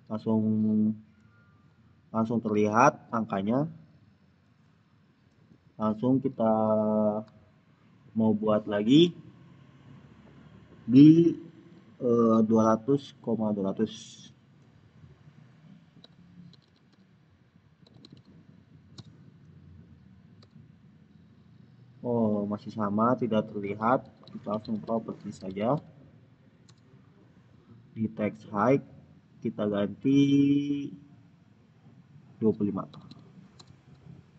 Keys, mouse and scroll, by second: 8.2 click, 10.2 click, 13.9 click, 15.7-18.5 typing, 18.8 Return, 22.3 Return, 23.3-26.1 typing, 26.5 Return, 27.7-29.8 scroll down 1, 30.5-31.7 scroll down 1, 31.7 click, 32.6-33.4 typing.